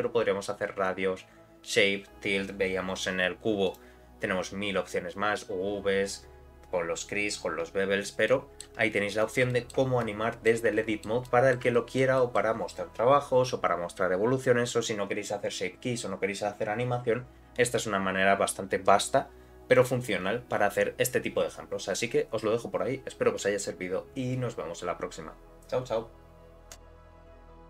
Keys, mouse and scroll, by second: 3.7 click, 8.3 middle click, 9.5 shift+middle click, 10.0 middle click, 10.7 shift+middle click, 11.3 middle click, 11.7 shift+middle click, 12.2 middle click.